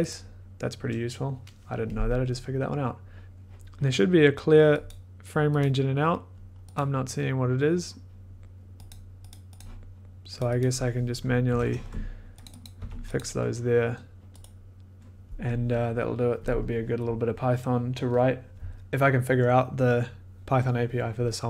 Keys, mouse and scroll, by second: 0.1 click, 0.1-0.7 ctrl+scroll, 4.8 click, 5.6 click, 6.7 click, 8.9 click, 9.3 click, 10.4 click, 10.6 click, 11.2-13.3 typing, 12.4 click, 12.6 click, 13.1 click, 14.4 right click, 18.7 click.